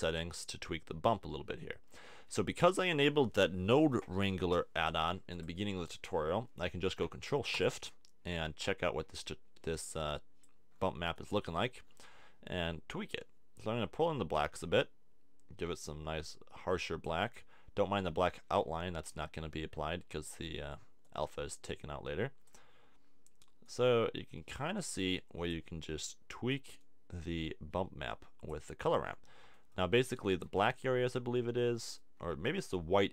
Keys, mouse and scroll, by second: 9.9 click.